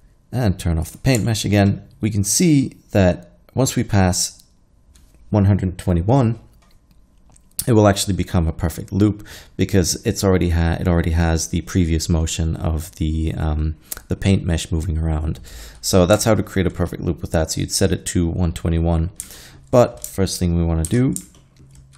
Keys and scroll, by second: 20.9 shift+z.